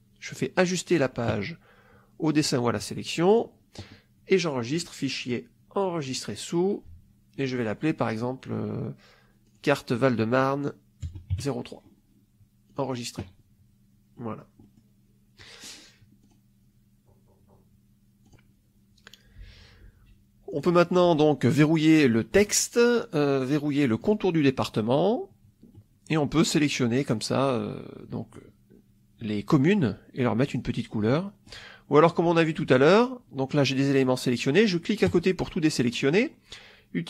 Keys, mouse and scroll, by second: 3.2 click, 4.7 click, 6.0 click, 9.4 click, 11.0 0, 11.2 3, 12.6 click, 14.0 middle click, 14.2 click, 15.3 middle click, 16.1 click, 18.2 click, 20.4 click, 22.3 click, 23.9 click, 25.6 middle click, 26.6-28.4 drag, 30.4 click, 31.0 middle click, 35.0 click.